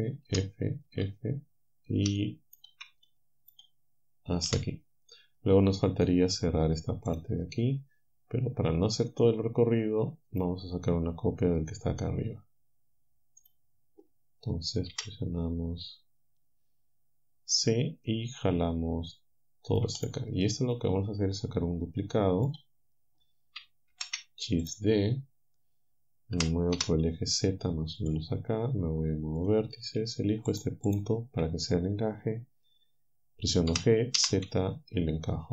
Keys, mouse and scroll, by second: 2.2 shift+right click, 3.1-4.5 right drag, 4.5 f, 5.1-6.2 right drag, 6.2 click, 7.1 click, 9.2-10.5 drag, 13.5 click, 14.9 c, 17.6-20.0 drag, 20.7-22.7 drag, 23.9 shift+d, 26.4 g, 26.8 z, 28.0 click, 29.4-33.7 drag, 33.7 g.